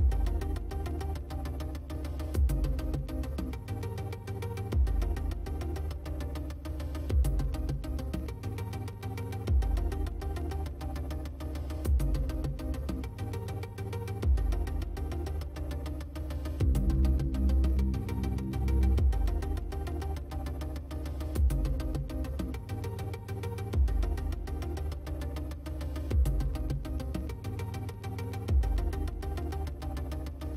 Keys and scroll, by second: 11.8 space, 17.6 space, 22.4 space.